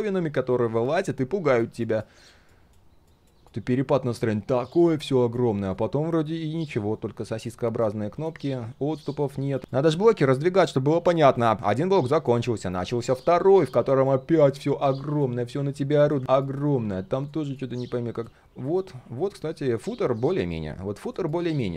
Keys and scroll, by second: 13.3 ctrl+z.